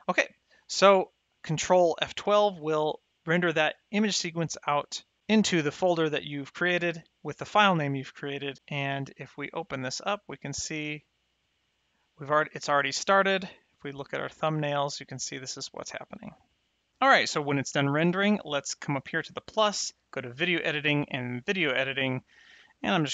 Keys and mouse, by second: 2.1 ctrl+F12, 9.6 click, 12.6 click, 18.5 click, 20.9 click.